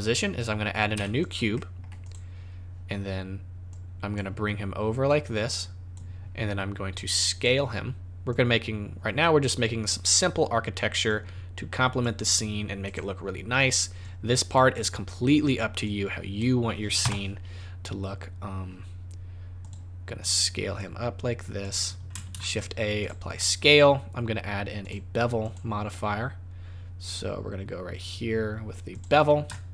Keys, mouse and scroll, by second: 0.9 z, 1.5 middle click, 2.0 click, 3.7 click, 5.0 click, 7.3 click, 8.2 click, 11.0 click, 12.8 click, 13.1-14.0 scroll down 4, 14.0 click, 14.7 middle click, 15.8 click, 17.0 KP_0, 19.6 click, 20.7 click, 22.3 ctrl+a, 23.3 middle click, 23.6 scroll down 3, 24.8 click, 25.4 click, 29.2 scroll up 4, 29.5 shift+middle click.